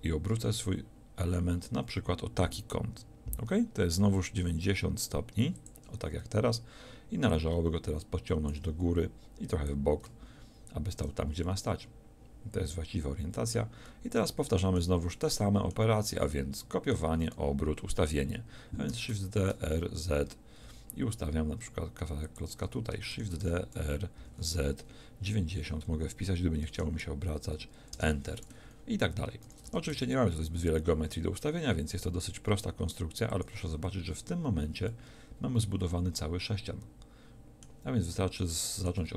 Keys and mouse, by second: 18.9 shift+d, 23.2 shift+d, 29.5 shift+d, 33.5 click, 34.0 a.